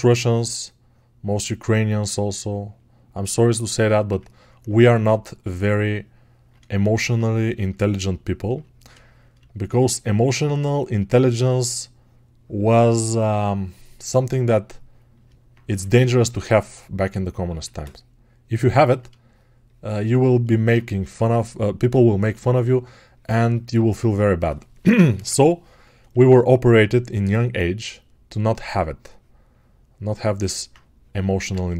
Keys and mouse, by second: 3.9-9.9 ctrl+drag, 20.6-30.0 ctrl+right drag, 30.0-31.7 ctrl+alt+drag.